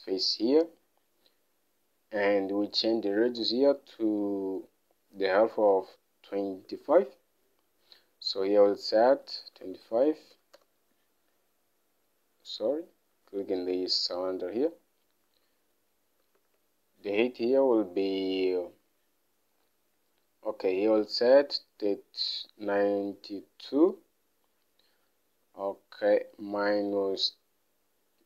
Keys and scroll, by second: 3.6 alt+Tab, 7.4 alt+Tab, 9.6-11.2 typing, 16.8 alt+Tab.